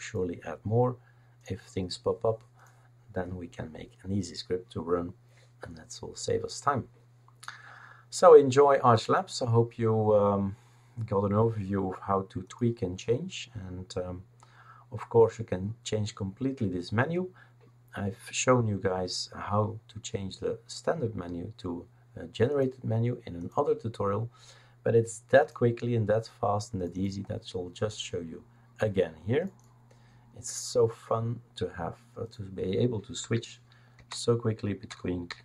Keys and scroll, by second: 33.2 F2, 33.9 Right, 34.9-35.4 typing.